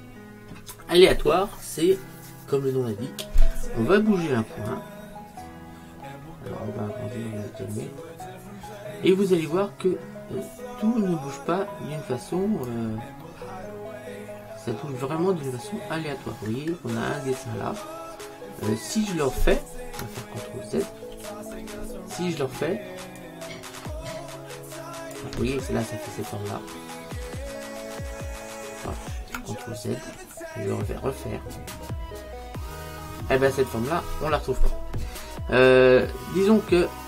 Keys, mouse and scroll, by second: 13.5-15.7 middle drag, 16.6-18.6 middle drag, 21.2 ctrl+z, 23.3 click, 30.1 ctrl+z, 31.6 click.